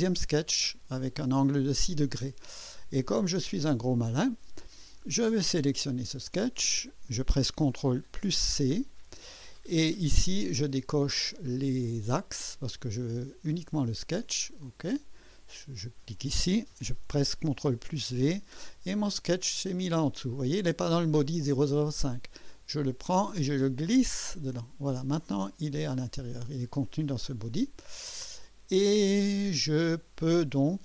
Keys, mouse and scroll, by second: 2.9-3.7 drag, 5.4 click, 8.1 ctrl+c, 11.8 click, 14.6 click, 15.6 click, 17.5 ctrl+v, 19.5 click, 20.4 click, 23.0-24.6 drag, 27.8-30.0 drag, 30.4 click.